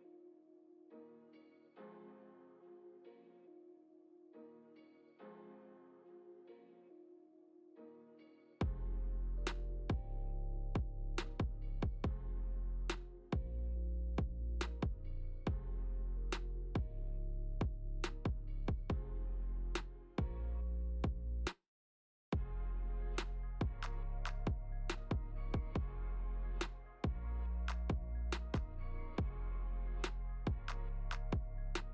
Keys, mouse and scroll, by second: 0.1 middle click, 1.3 click, 3.1 click, 5.2 Tab, 6.1 a, 7.1 click, 7.4 click, 7.6 click, 8.0 Tab, 8.9 click, 13.7 click, 14.2 middle click, 14.8-15.4 scroll down 3, 15.3 middle click, 15.9 middle click, 17.5 shift+middle click, 17.6 shift+middle click, 18.6 ctrl+s, 19.1 middle click, 20.2 click, 21.1 g, 23.1 shift+middle click, 24.4 g, 26.1 middle click, 26.7 shift+middle click, 27.8 g, 30.1 scroll up 1, 30.2 shift+middle click, 30.2 click, 31.0 g.